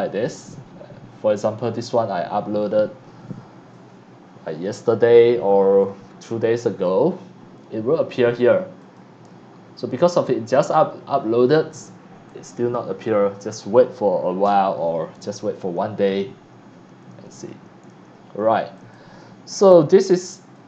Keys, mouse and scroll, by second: 17.3 click, 18.7 click, 20.5 click.